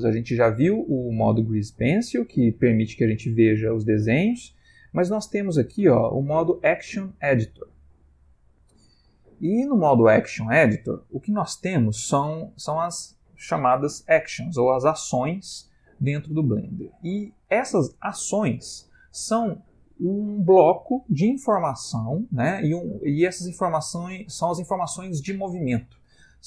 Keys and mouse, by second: 0.0 click.